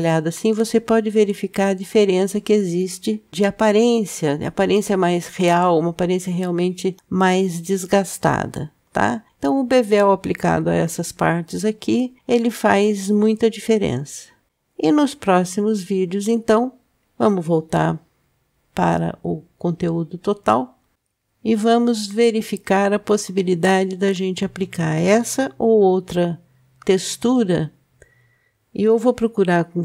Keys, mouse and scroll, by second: 1.4 click, 3.3 ctrl+b, 7.0-7.9 middle drag, 8.6-9.7 scroll down 3, 10.6 Tab, 14.5-15.5 scroll down 2, 15.5-17.5 scroll down 1, 18.2 KP_Divide, 20.9-22.7 scroll down 2, 23.5-24.8 middle drag.